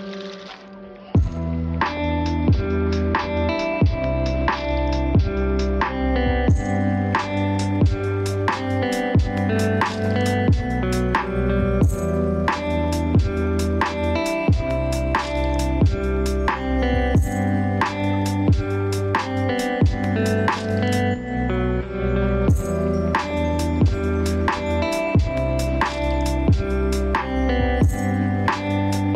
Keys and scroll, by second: 3.3 ctrl+v, 8.0 ctrl+space, 14.3 ctrl+space.